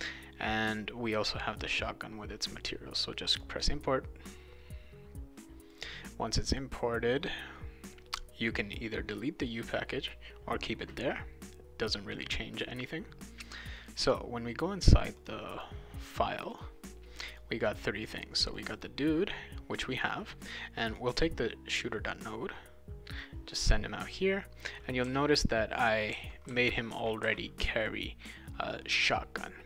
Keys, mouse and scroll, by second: 3.3 click, 5.7 click, 9.1 click, 13.5 click, 13.7 click, 15.1 click, 15.5 click, 16.3 click, 16.5 click, 17.3 click, 17.7 click, 18.0 click, 18.5 click, 18.8 click, 20.9 click, 21.7-23.2 drag, 24.4-27.8 right drag, 25.0-27.7 typing.